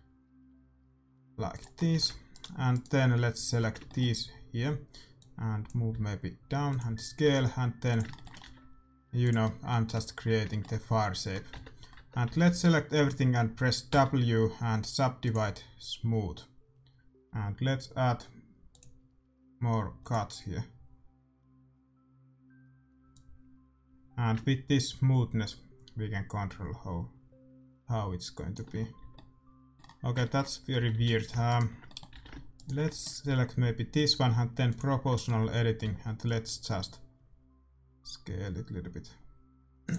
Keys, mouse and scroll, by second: 1.7 middle click, 2.2-5.0 right drag, 2.2 a, 3.5-5.8 middle drag, 5.1-7.1 drag, 5.8 s, 7.8 e, 8.1 middle click, 8.4 s, 11.5 Tab, 11.9 Tab, 12.2 a, 12.4 a, 13.8 w, 18.6-21.7 drag, 23.0-24.8 drag, 28.8-30.7 middle drag, 28.9 a, 30.7 a, 30.9 a, 31.4-36.8 middle drag, 31.4-34.4 right drag, 32.1 a, 33.9-35.6 drag, 35.7 s.